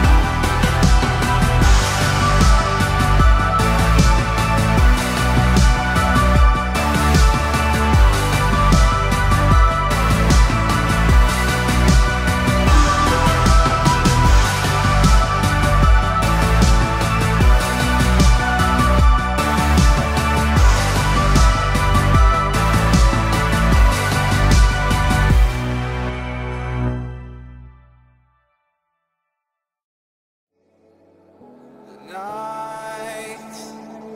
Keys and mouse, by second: 2.8 a, 3.1 a, 4.0 c, 11.1 KP_3, 14.2 c, 20.9 g, 31.9 a, 32.1 a, 33.5 c.